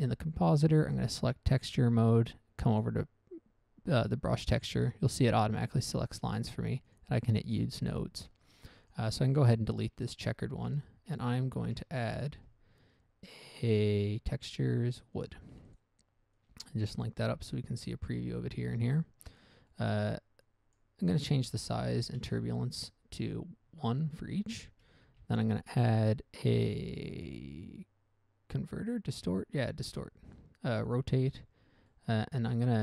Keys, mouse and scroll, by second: 1.2 click, 3.1 click, 7.2 click, 8.1 middle click, 8.4 middle click, 8.5-9.1 scroll up 1, 9.1 scroll up 1, 9.1 click, 10.4 middle click, 10.4 x, 10.6 middle click, 10.8 a, 12.0 shift+a, 12.5 shift+a, 15.5 click, 16.0 click, 16.1 double click, 16.7 double click, 17.4 click, 19.2 middle click, 19.6 middle click, 20.0 middle click, 20.2 middle click, 20.8 click, 21.1 click, 22.5 0, 22.6 Return, 23.8-24.2 scroll down 1, 24.2 middle click, 24.5 middle click, 24.6-25.0 scroll up 1, 25.4 shift+a, 30.2 click, 31.2 click, 31.6 click, 32.2 middle click, 32.5-32.8 scroll up 1.